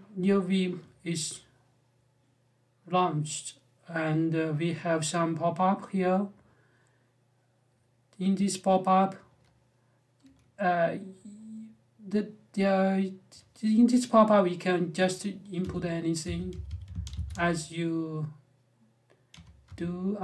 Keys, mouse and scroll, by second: 15.4-17.4 typing, 19.1 ,, 19.4 space.